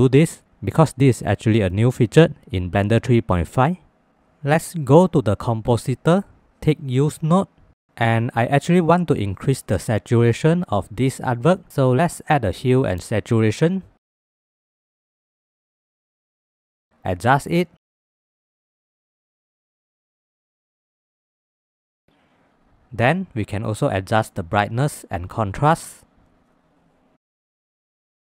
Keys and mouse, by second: 5.1-6.3 drag, 7.6 click, 9.5 middle click, 10.5 middle click, 11.8 shift+a, 16.7 click, 17.5-19.9 drag, 21.0 ctrl+s, 22.6 shift+a, 26.1 click, 27.1-28.2 drag.